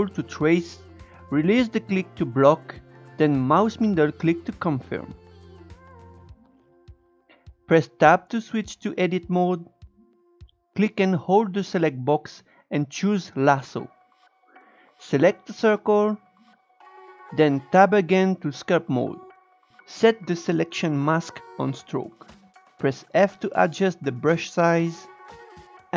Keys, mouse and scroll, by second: 8.2 Tab, 11.1-14.0 drag, 16.7 Tab, 21.0 click, 22.2-25.6 f.